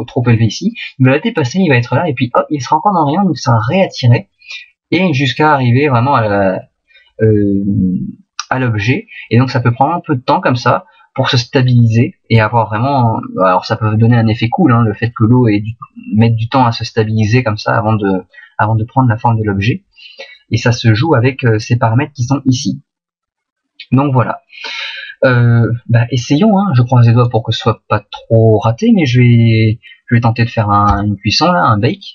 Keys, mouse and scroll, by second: 27.1 right click, 30.9 click.